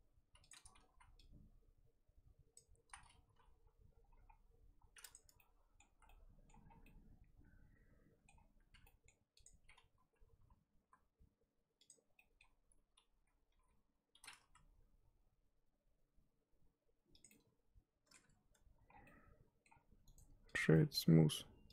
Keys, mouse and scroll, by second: 0.9 z, 2.5 click, 2.9 z, 3.3 g, 5.2 Tab, 5.4 middle click, 5.8 z, 6.0 middle click, 6.6 scroll down 4, 6.8-8.3 middle drag, 8.3-8.7 scroll up 4, 8.7 Tab, 8.8 middle click, 9.4 click, 10.4 l, 10.8 l, 11.8 click, 12.0 scroll down 1, 12.1-13.5 middle drag, 13.5 g, 17.3 middle click, 18.2 Tab, 18.9 scroll down 1, 19.0 middle click, 19.7-20.5 scroll up 1, 20.5 right click, 20.7-21.7 middle drag.